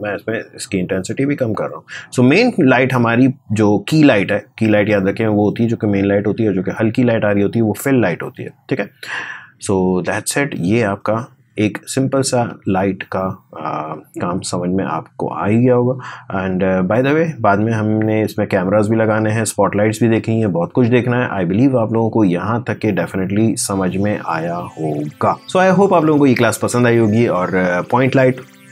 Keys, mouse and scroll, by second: 10.8 click, 11.4 space, 11.6 click, 11.8 space, 13.7-24.3 drag.